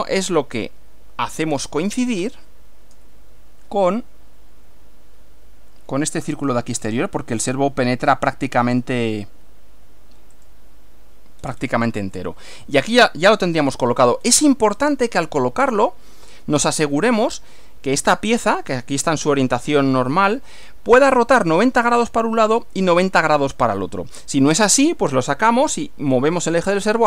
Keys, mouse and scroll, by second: 10.4 click, 11.4-11.8 scroll down 1, 12.2-14.1 middle drag, 14.2-14.6 scroll down 1, 14.8 click, 15.2-16.5 middle drag, 16.8 scroll up 1, 17.3 shift+middle click, 18.2-19.4 shift+middle drag.